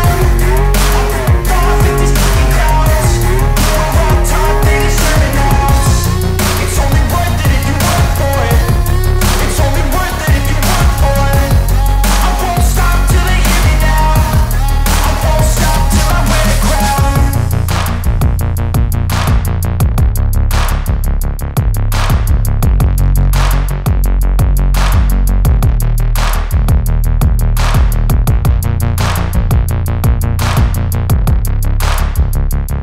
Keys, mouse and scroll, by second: 0.1 click, 0.6 scroll down 1, 1.9-5.1 drag, 5.1 ctrl+right click, 6.7-10.4 drag, 10.4 scroll up 1, 11.7-16.5 drag, 17.7 scroll down 1, 18.7-19.3 scroll up 1, 21.0 alt+scroll up 1, 25.8 click, 26.6-26.9 scroll up 1, 28.0-32.8 drag.